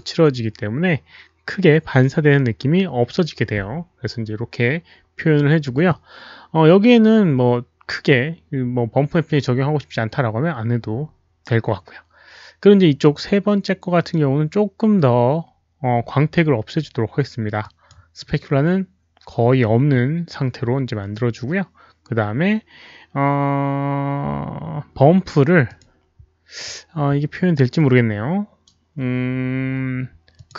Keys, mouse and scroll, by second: 13.9 click, 17.5 drag, 23.0 click, 23.0 scroll down 1, 25.6 click, 28.4 click, 29.7 click, 30.3 click.